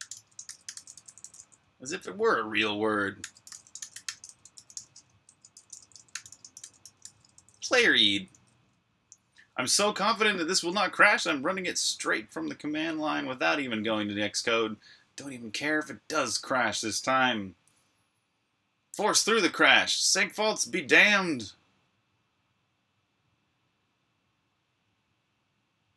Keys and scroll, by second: 0.0-3.3 typing, 4.3 typing, 8.2 super+r, 8.3-9.7 typing.